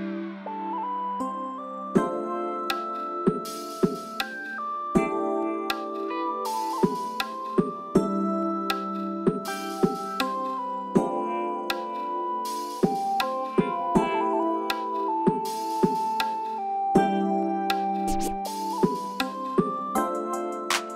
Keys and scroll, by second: 2.4 v, 3.8 m, 8.2 v.